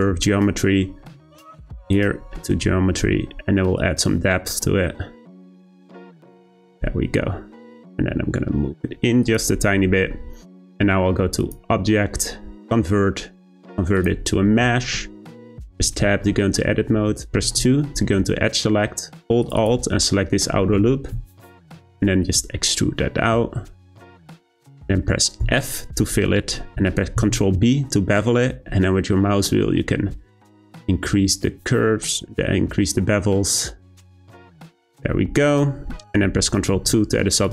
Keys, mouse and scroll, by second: 0.9-1.8 scroll down 2, 1.8-2.4 drag, 2.4-3.8 scroll down 6, 3.8-6.8 drag, 7.9 g, 11.4-14.4 drag, 14.5-15.2 shift+middle drag, 15.2-15.7 scroll up 2, 15.7 Tab, 16.1 shift+middle click, 16.4-17.4 scroll up 2, 17.4 2, 19.4 click, 19.6 click, 20.0 middle click, 20.8 `, 21.8 e, 24.7 middle click, 25.4 f, 26.3 middle click, 27.1 b, 34.5 Tab, 34.8-35.1 scroll down 2, 35.1-36.7 middle drag, 36.7 ctrl+2, 37.3-37.5 right drag.